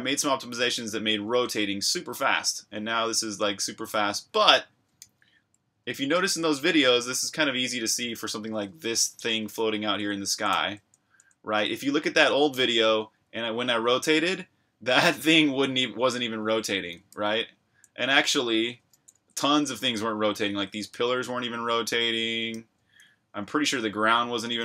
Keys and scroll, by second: 0.0-5.0 typing, 6.3-12.0 typing, 13.1 c, 17.1-19.9 typing, 21.7-23.4 typing, 24.5-24.6 typing.